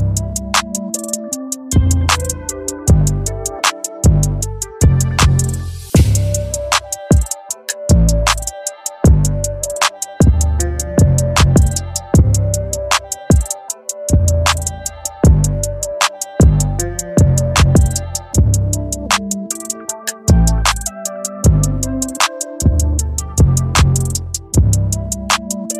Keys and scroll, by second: 16.5 Return.